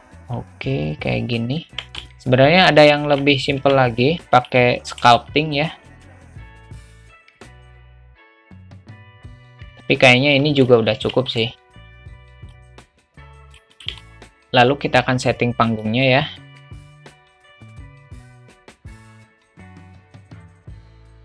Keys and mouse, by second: 1.7 Tab, 2.0-3.2 alt+drag, 3.6 Tab, 4.8 alt+middle click, 6.0 g, 7.0 alt+middle click, 7.6 click, 7.8 alt+middle click, 8.3 g, 9.2 Tab, 9.4-10.6 middle drag, 10.9 `, 12.5-13.6 drag, 13.7 click, 14.1-14.5 alt+middle drag, 14.5 ctrl+z, 15.9 click, 16.5 shift+a, 16.8 s, 17.3 Delete, 17.8 shift+a, 18.1 s, 19.1 alt+middle click, 19.2 Tab, 19.4 click, 19.4-21.0 typing, 19.8 alt+middle click, 20.0 ctrl+b, 20.3 Tab, 20.9 middle click.